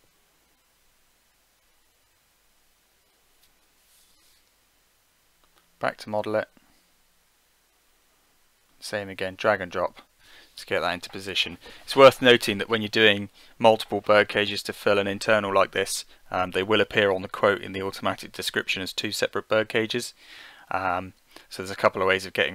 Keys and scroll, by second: 1.1-2.5 typing.